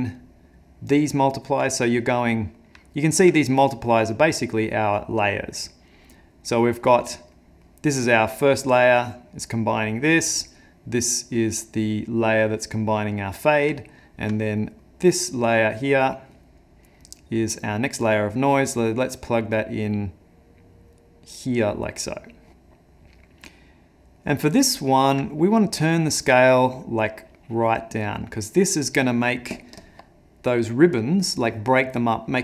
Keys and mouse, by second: 1.2 middle click, 1.7 ctrl+middle click, 4.0 click, 5.9 click, 7.3 middle click, 8.9 click, 9.8 middle click, 11.5 click, 13.8 ctrl+middle click, 14.5 middle click, 17.7 click, 22.5 middle click, 23.6 ctrl+middle click, 25.3 middle click, 26.1 click.